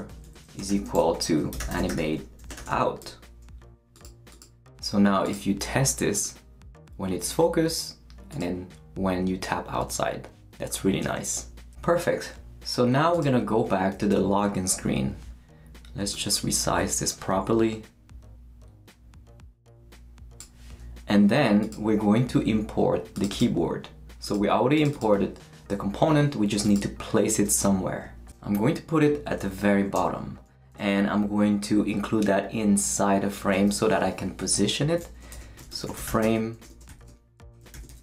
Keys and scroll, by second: 0.0-3.2 typing, 29.9 Return, 35.1-38.0 typing, 37.4 shift+Return, 37.6 shift+Return.